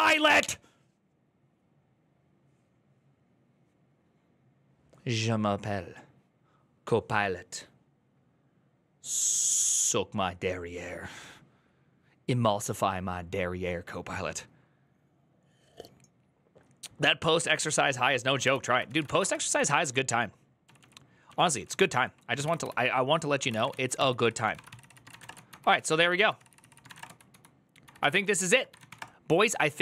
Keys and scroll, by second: 18.4 alt+{, 18.5-29.8 typing.